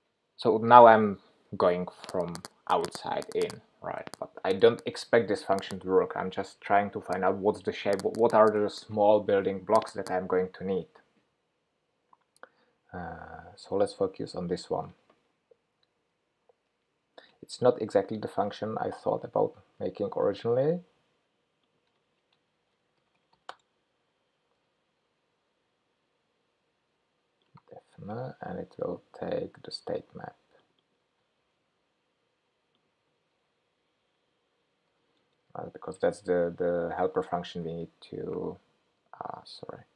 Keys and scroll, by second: 16.8 alt+shift+Right, 20.2 super+c, 24.5 super+v, 31.5 super+c, 35.0 super+v, 37.0 ctrl+k.